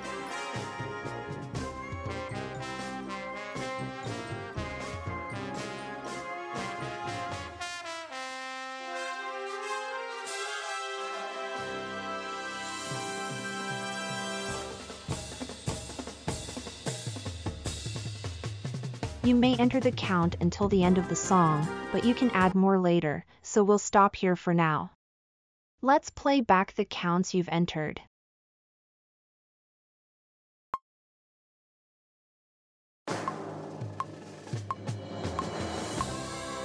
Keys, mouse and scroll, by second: 8.0 click, 8.0 right click, 10.9 space, 13.6 space, 14.5 space.